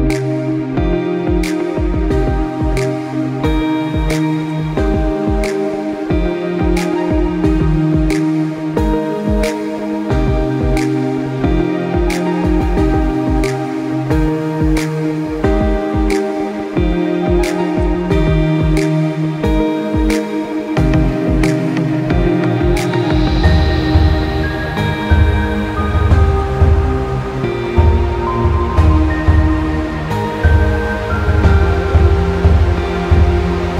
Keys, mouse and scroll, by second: 2.3 click, 2.5 middle click, 3.0 middle click, 6.1 ctrl+r, 7.8 s, 10.1 ctrl+b, 12.9 click, 13.2 middle click, 13.2-13.7 scroll up 1, 13.7-14.6 scroll down 3, 13.9 middle click, 14.6 Tab, 14.9 middle click, 16.2 middle click, 17.5 KP_1, 18.9 shift+d, 20.0 g, 22.4 shift+d, 23.4 g, 25.2 middle click, 26.1 click, 26.9 middle click, 27.3 middle click, 27.6 middle click, 28.0-28.7 scroll down 4, 28.2 middle click, 28.8 shift+a, 31.8 click, 32.9 click.